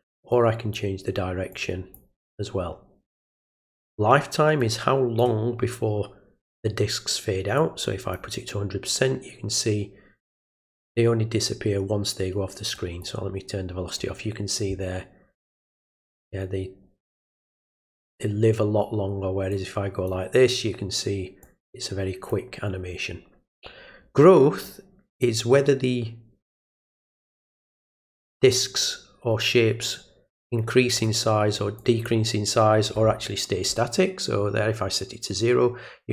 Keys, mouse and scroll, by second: 0.3 click, 1.5 click, 4.6 click, 7.6 click, 12.7 click, 19.5 click, 21.4 click, 24.6 click, 26.6-30.9 drag, 31.8 click.